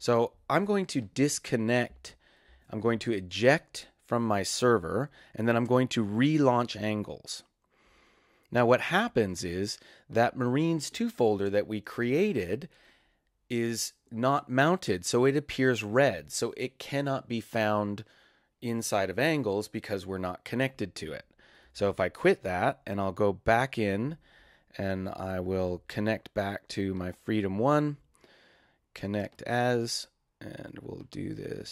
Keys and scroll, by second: 2.4 super+e, 21.7 super+q, 31.6-31.7 typing.